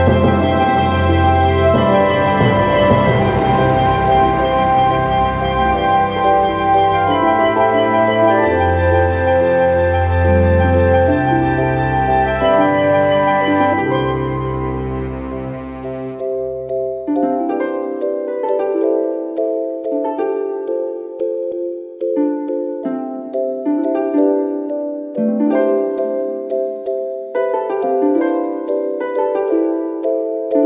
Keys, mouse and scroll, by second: 0.5 click, 1.6 click, 8.3 click, 9.7-10.0 scroll down 1, 10.2-12.1 drag, 12.2 0, 12.9-13.5 scroll up 3, 14.3 click, 14.8 right click, 16.6 click, 17.3 click, 18.0-20.4 drag, 20.2 0, 21.0-21.4 scroll down 2, 21.7-22.0 scroll up 2, 22.3 scroll down 2, 23.2 scroll up 2, 25.1 click, 27.5 click.